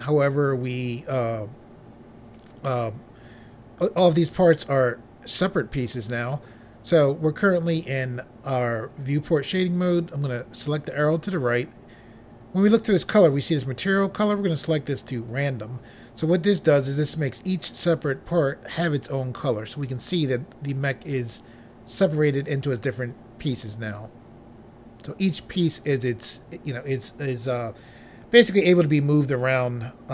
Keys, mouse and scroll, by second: 10.7 click, 15.1 click.